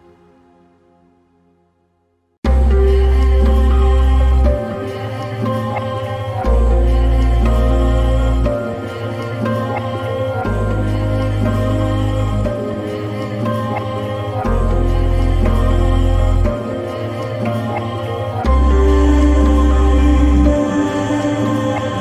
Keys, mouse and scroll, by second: 13.2 typing, 16.3 typing.